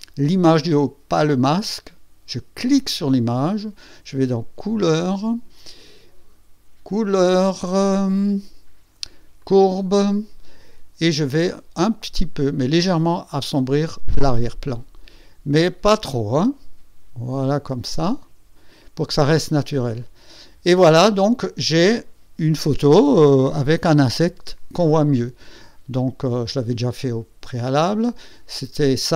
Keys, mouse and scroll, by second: 2.7 click, 3.1 click, 4.8 click, 9.3 click, 12.9-18.9 drag, 19.9 click, 26.2 click, 27.6 click.